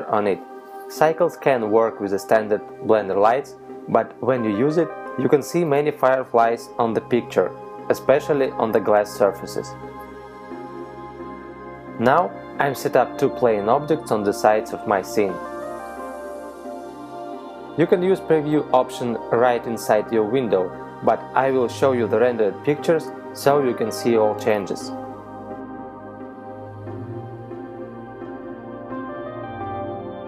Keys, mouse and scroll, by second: 2.3 middle click, 3.9 s, 5.8 click, 7.0 s, 8.0 click, 8.3 s, 9.7 click, 10.0 middle click, 15.3 alt+d, 15.7 right click, 16.6 click, 18.8 KP_7, 23.3 click, 24.1 middle click, 25.7 right click, 26.5 click, 27.7 middle click.